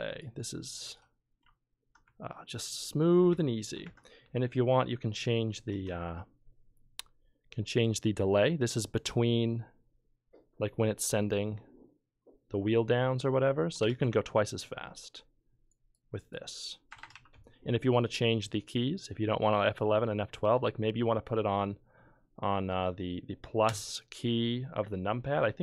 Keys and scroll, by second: 13.7 BackSpace, 13.8 BackSpace, 14.0 5, 16.9 BackSpace, 17.1 5.